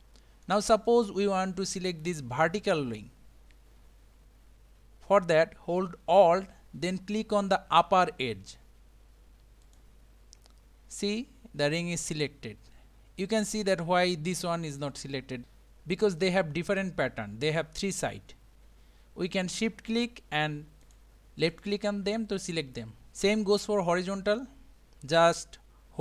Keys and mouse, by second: 0.8 click, 9.6 alt+click, 10.9-13.6 middle drag, 20.8 shift+click, 21.5 shift+click, 25.3 click.